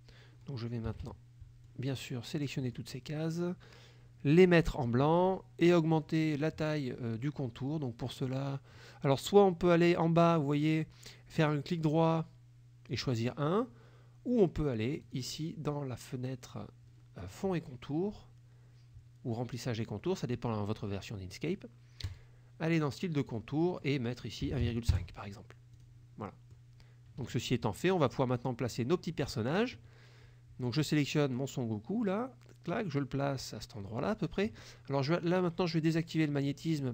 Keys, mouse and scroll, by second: 0.9 KP_Subtract, 1.7 click, 2.6 click, 4.4 click, 11.5 right click, 13.0 click, 15.1 click, 22.1 click, 23.3 click, 23.7 click, 24.5 KP_1, 24.6 KP_Decimal, 24.7 KP_5, 25.0 KP_Enter, 25.9 click, 26.3 middle click, 27.3 KP_Subtract, 28.0 middle click, 28.8 click, 31.4-34.3 drag, 36.5 click.